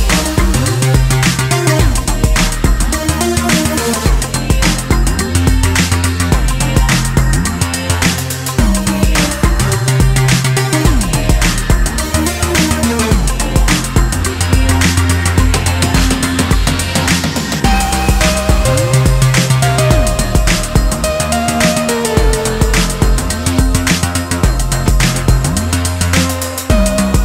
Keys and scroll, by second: 11.8 ctrl+space, 12.3 ctrl+space, 15.1 ctrl+space.